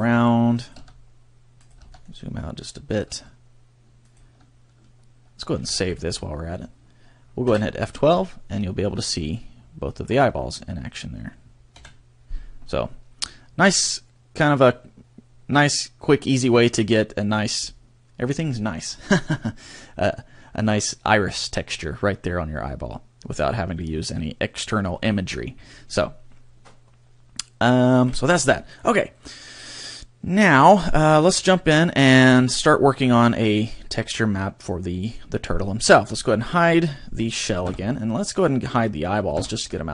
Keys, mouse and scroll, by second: 0.1 click, 0.7 click, 1.7 click, 5.6 ctrl+s, 28.0 Escape, 29.2 right click, 31.4 KP_1, 32.8 shift+middle click, 35.9 right click, 38.4 right click, 39.7 scroll down 1.